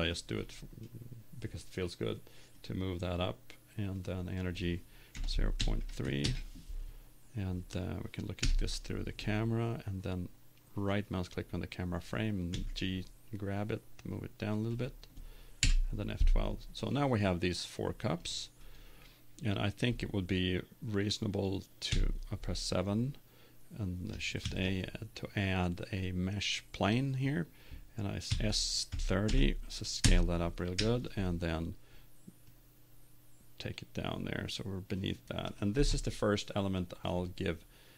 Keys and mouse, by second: 2.5 right click, 3.0-5.7 drag, 8.4 KP_0, 10.9-12.9 right drag, 12.5 g, 14.8 click, 15.6 click, 18.7 F12, 18.7-20.1 drag, 21.9 KP_7, 24.4 shift+a, 28.2 s, 30.8 KP_1, 32.5-34.3 drag.